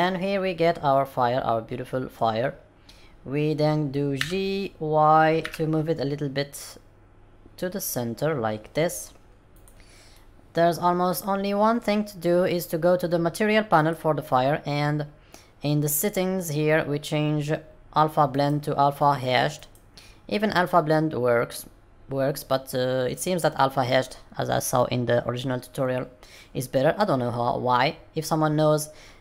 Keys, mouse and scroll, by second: 4.1 g, 10.1 middle click, 13.8 click, 15.3-16.3 scroll down 1, 16.3-16.6 scroll down 2, 17.1-18.2 scroll down 1, 18.2 click, 18.2-19.7 scroll down 1.